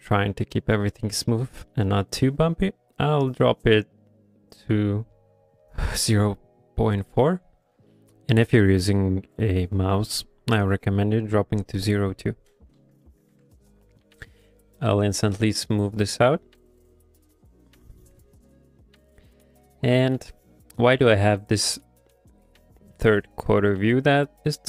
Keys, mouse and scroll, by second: 0.3 click, 0.6 click, 0.8 middle click, 1.3 middle click, 1.7 middle click, 3.7 click, 13.1 ctrl+middle click, 13.7-16.1 shift+click, 18.8 shift+click, 18.8 shift+middle click, 19.5 shift+middle click, 21.0 shift+middle click.